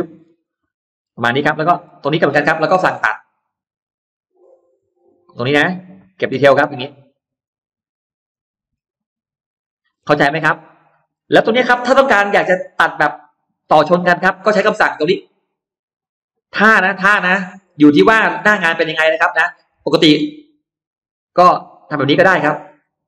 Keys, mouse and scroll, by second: 0.0-1.2 scroll down 2, 0.3 middle click, 1.3 middle click, 1.6-2.2 scroll up 2, 3.6 click, 4.6 click, 5.4 click, 6.4 click, 6.8-7.1 scroll up 2, 7.3 click, 8.1 click, 8.5 scroll up 1, 9.3 click, 9.8 scroll down 1, 10.5 middle click, 10.5-10.8 scroll down 1, 11.2 middle click, 11.4-11.8 scroll down 2, 11.9-12.2 scroll up 2, 12.6 scroll up 2, 12.6 middle click, 13.0 scroll down 2, 13.6-14.6 scroll up 4, 16.9 click, 17.8 click, 18.1-18.4 scroll down 2, 18.6 middle click, 19.0 scroll down 1, 19.4 scroll up 1, 20.0 click, 20.6 click, 21.0 middle click, 21.7 click, 22.7 click.